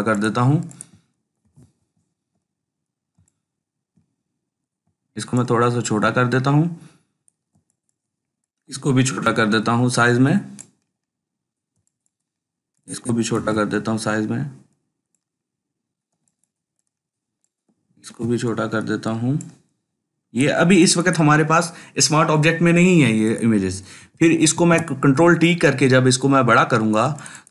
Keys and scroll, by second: 1.3 ctrl+t, 8.9 ctrl+t, 13.2 ctrl+t, 17.9 ctrl+t, 23.9 ctrl+r, 24.4 ctrl+t.